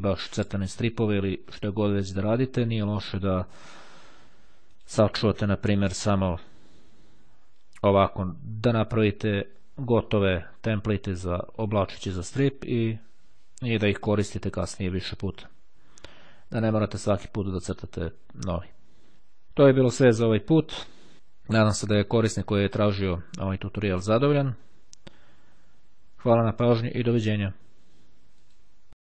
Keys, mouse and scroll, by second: 4.9 click, 6.3 click, 13.5-14.8 drag, 15.1 click.